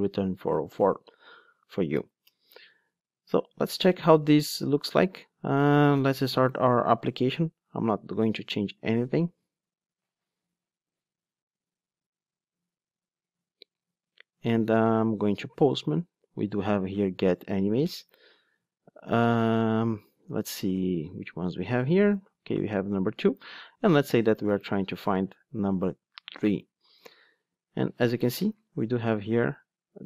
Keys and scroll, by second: 2.0 alt+Return, 9.2 ctrl+d.